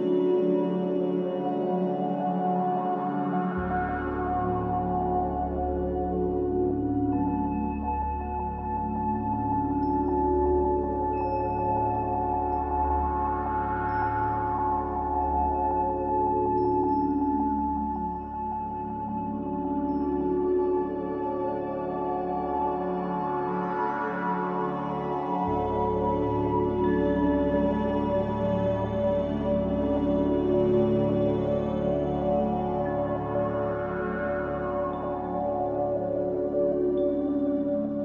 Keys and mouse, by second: 0.3 click, 1.3-2.1 drag, 4.5 F4, 5.8-6.2 middle drag, 8.8 Tab, 9.8-10.3 middle drag, 10.6 middle click, 11.3-12.4 middle drag, 14.1-16.6 middle drag, 17.9 `, 19.6 ctrl+r, 23.8 middle click, 27.5 typing, 28.3 alt+shift+click, 29.5-30.3 alt+shift+drag, 30.8 middle click, 32.6 alt+shift+click, 34.4 middle click, 37.1 middle click.